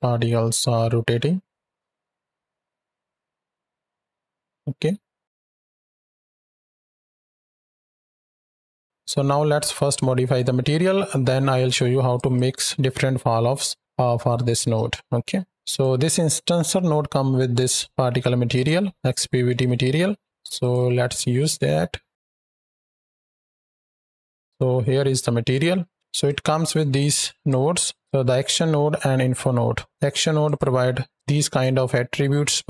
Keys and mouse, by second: 5.4-8.7 drag, 8.8 ctrl+click, 11.6-12.0 drag, 12.2-13.8 drag, 15.5 click, 20.4 click, 22.1 click, 22.6 KP_7, 23.2 z, 23.9 click, 24.4-24.9 drag, 25.4 ctrl+middle click, 25.9 ctrl+space, 26.1-27.3 drag, 27.7 drag, 30.3 click, 31.4-32.6 drag.